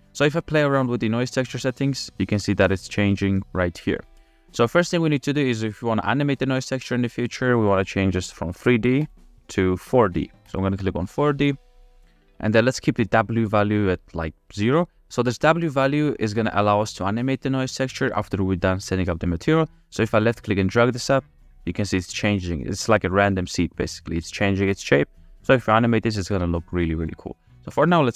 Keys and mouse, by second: 0.1 ctrl+z, 2.5-3.7 drag, 5.5 click, 6.9 click, 9.0-10.8 drag, 15.1 ctrl+z, 20.4-24.0 drag, 27.4 middle click.